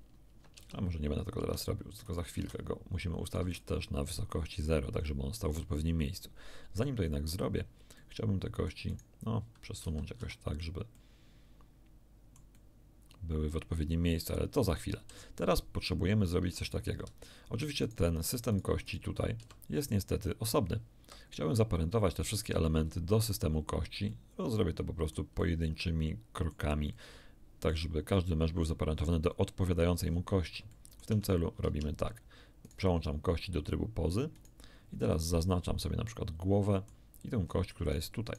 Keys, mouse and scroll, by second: 0.6 ctrl+Tab, 1.4 ctrl+Tab, 2.0 click, 2.4 click, 2.4 x, 3.2 right click, 3.4 x, 3.5 click, 6.2-6.6 scroll up 1, 6.8 shift+middle click, 7.0 shift+click, 8.0 shift+click, 8.9 middle click, 9.8 a, 10.2 a, 10.6 scroll down 1, 11.0 click, 11.6-14.8 middle drag, 16.6 right click, 17.8 right click, 18.5 right click, 18.8 right click, 19.4 g, 21.0 Escape, 24.1-25.3 middle drag, 26.9-27.9 middle drag, 30.0-30.4 scroll up 2, 30.7 shift+middle click, 31.7 ctrl+shift+Tab, 32.6 ctrl+right click, 34.4 right click, 35.0 scroll up 1, 35.8-37.1 middle drag, 37.4-37.8 scroll up 1, 38.2 shift+right click.